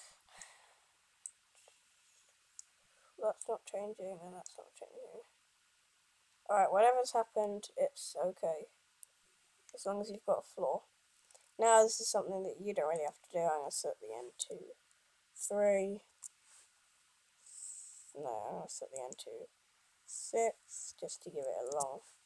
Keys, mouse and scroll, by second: 21.2 click.